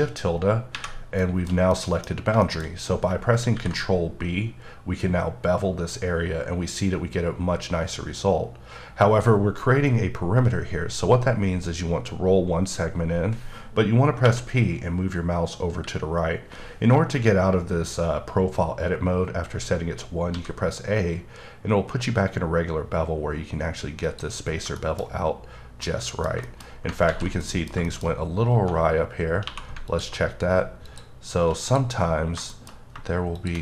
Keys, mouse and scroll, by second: 0.7 shift+`, 1.2 shift+middle click, 2.1-2.9 scroll up 5, 2.4 middle click, 3.5 b, 11.9 b, 13.5-14.0 scroll up 1, 14.2 p, 20.6 a, 24.0 click, 24.7 shift+middle click, 26.4 double middle click, 26.6 scroll up 2, 27.0 ctrl+z, 27.4 middle click, 27.8 shift+middle click, 28.1-28.5 scroll up 2, 28.5 1, 28.9-29.4 scroll up 2, 29.4 2, 29.9 alt+click, 32.1-32.9 scroll up 5, 32.5 shift+middle click, 33.4 shift+click.